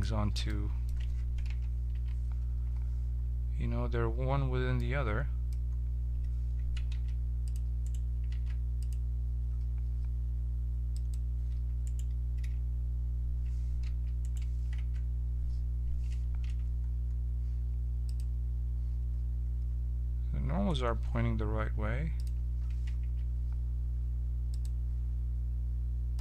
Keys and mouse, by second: 0.4-1.4 middle drag, 1.4 KP_1, 1.9 z, 5.4-6.9 middle drag, 6.9 ctrl+a, 7.8 right click, 8.3 ctrl+a, 10.9-12.4 drag, 11.8 right click, 12.4 z, 13.8 h, 14.2 right click, 14.8 Tab, 16.4 n, 18.0-20.0 drag, 22.1-26.2 drag, 23.0 Tab.